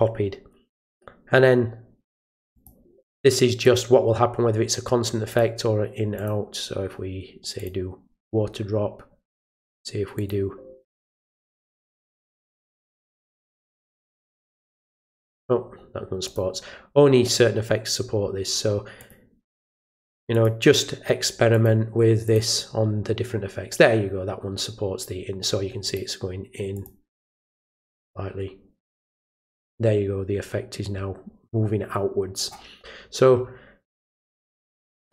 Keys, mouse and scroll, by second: 2.5 click, 3.6 click, 5.3 click, 6.1 click, 7.5 click, 9.4 click, 10.1 click, 11.6 click, 12.7 click, 14.1 click, 14.9 click, 16.2 click, 19.0 click, 19.4 click, 20.3 click, 21.5 click, 22.2 click, 25.8 click, 26.7 click.